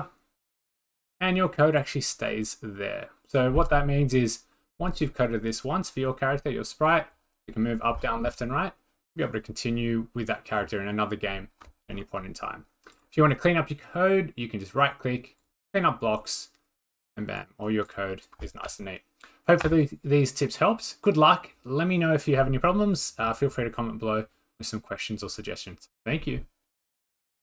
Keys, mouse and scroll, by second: 2.2 click, 2.6 scroll, 3.2 scroll, 6.9 click, 7.6-8.3 drag, 13.0 right click, 15.4 click, 17.4 click, 18.2 click.